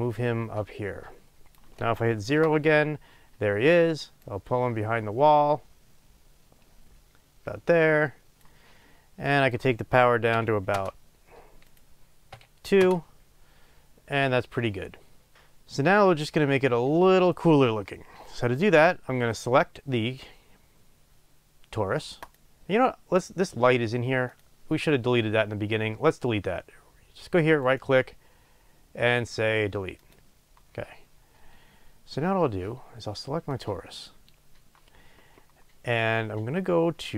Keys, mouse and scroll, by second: 2.2 KP_0, 10.8 Return, 12.9 Return, 30.1-33.6 right drag, 33.6 click.